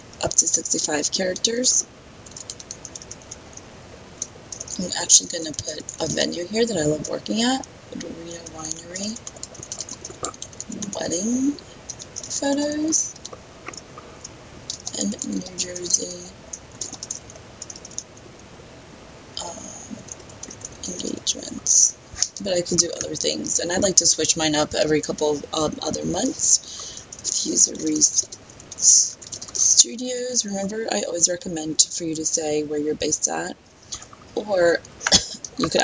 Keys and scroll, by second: 2.8 BackSpace, 3.0 BackSpace, 3.2 BackSpace, 4.5 BackSpace, 6.3 space, 9.1 BackSpace, 9.8 space, 12.0 space, 13.5 space, 14.8 space, 15.4 space, 16.0 BackSpace, 17.1 space, 17.6 BackSpace, 17.9 BackSpace, 27.8-29.3 typing.